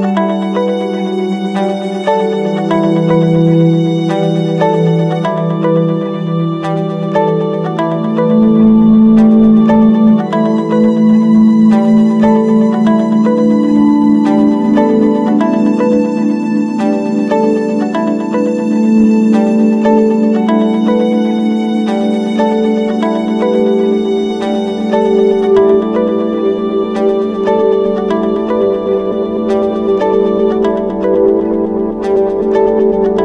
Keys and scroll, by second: 5.8 Return, 7.0 ctrl+0, 8.2 ctrl+space, 15.4 ctrl+-, 15.7 ctrl+0, 24.6 ctrl+=.